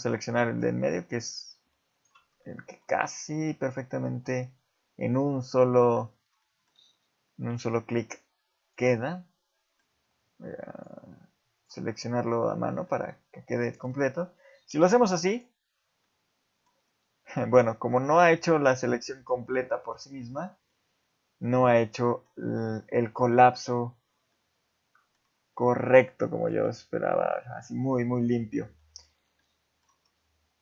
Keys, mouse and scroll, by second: 1.0 scroll up 1, 1.9 alt+shift+click, 2.4 middle click, 3.6 alt+shift+click, 5.0 alt+shift+click, 5.7 middle click, 6.0 scroll up 1, 6.4 shift+middle click, 6.7 scroll up 3, 7.7 shift+middle click, 8.6 shift+click, 8.9 middle click, 10.7 shift+click, 11.5 shift+click, 11.8 scroll down 2, 12.0 middle click, 12.5 scroll down 1, 12.9 middle click, 14.0-14.7 scroll down 1, 14.7 scroll down 1, 14.7 x, 16.0 middle click, 16.7-17.2 scroll up 1, 20.3-20.7 scroll down 3, 20.7 middle click, 21.8 middle click, 22.7 middle click, 24.3 middle click, 25.4 scroll up 2, 25.9 middle click, 26.6 ctrl+z, 27.3 middle click, 28.8 middle click, 29.4 middle click, 30.1 scroll down 2.